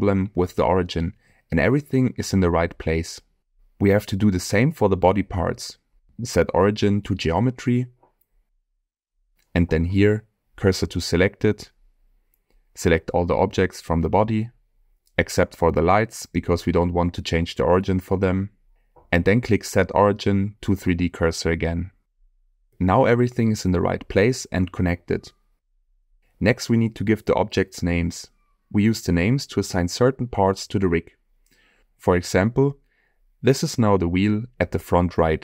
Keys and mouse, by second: 2.8 middle click, 3.7 middle click, 4.1-4.8 middle drag, 6.1-8.5 right drag, 9.5 click, 10.8 shift+s, 14.9-15.4 middle drag, 15.8 shift+middle drag, 16.8-17.4 shift+drag, 17.9-18.4 middle drag, 18.8 shift+click, 19.2-20.6 drag, 21.6-22.2 middle drag, 22.8 click, 26.8 click, 32.4 click, 33.3 middle click, 34.6 shift+middle click, 35.3 middle click.